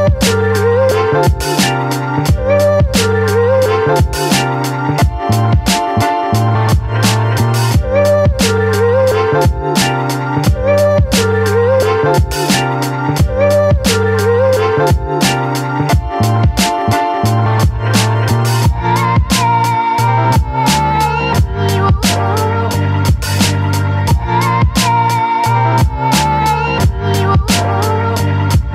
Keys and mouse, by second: 2.0 click, 3.3 right click, 4.0 ctrl+z, 4.3 click, 5.2 click, 5.8 ctrl+z, 6.2 right click, 6.9 ctrl+z, 6.9 right click, 7.4 right click, 7.7 ctrl+z, 8.0 right click, 8.4 ctrl+z, 8.7 right click, 9.4 ctrl+z, 9.4 click, 10.4 click, 10.8 ctrl+z, 11.0 click, 11.5 ctrl+z, 11.7 click, 12.1 ctrl+z, 12.3 click, 14.0 ctrl+z, 14.6 middle click, 16.4-17.8 middle drag, 18.3 shift+middle click, 18.7-20.7 middle drag, 20.8-22.6 middle drag, 24.1 click, 25.3 click, 27.1 click, 27.7 ctrl+z, 28.1 click.